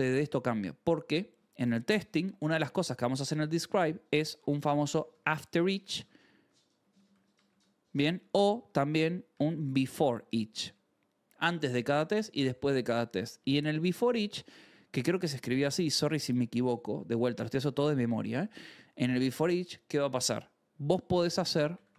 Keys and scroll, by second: 0.0-3.3 typing, 3.7 Return, 4.5-7.9 typing, 9.1-11.0 typing, 12.7-15.4 typing, 15.5 Return, 17.0 Escape, 17.3-19.2 typing, 21.4-21.9 typing.